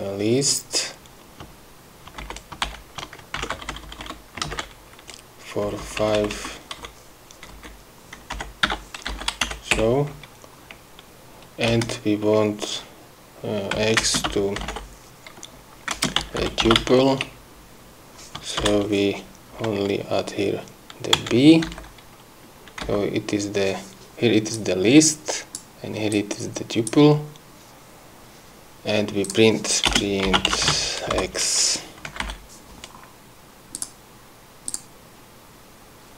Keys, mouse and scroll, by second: 2.7 shift+Up, 3.1 shift+End, 3.9 ctrl+shift+c, 4.1 ctrl+Down, 5.0 ctrl+v, 6.2 Left, 8.0 Right, 8.9 BackSpace, 9.6 End, 9.9 BackSpace, 12.2 Return, 14.3 x, 14.5 space, 14.8 =, 15.1 BackSpace, 16.4-17.8 typing, 21.7 b, 22.2 End, 23.3 Up, 25.0-26.2 drag, 26.6 click, 27.8 scroll down 2, 29.7 click, 30.4 Return, 30.6-32.6 typing, 32.7 End, 34.2 click, 35.2 click.